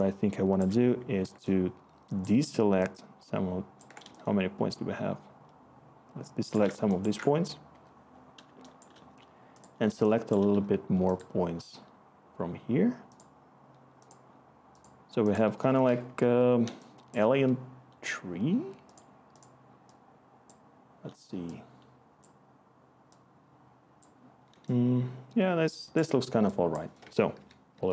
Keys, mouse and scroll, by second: 7.7 Return, 16.0 Return, 17.1 click, 25.0-25.9 click, 27.0 Tab, 27.0 click, 27.3-27.9 typing.